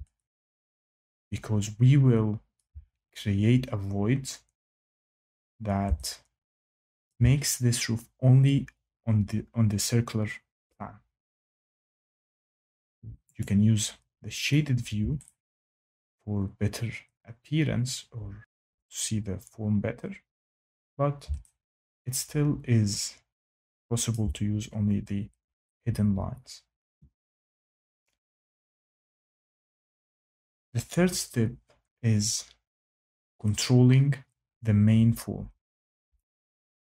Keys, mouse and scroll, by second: 2.5 shift+middle click, 7.0 shift+click, 13.3 click, 14.4 click, 18.3 shift+middle click, 18.7 click, 20.7 click, 24.0 shift+middle click, 36.1 click.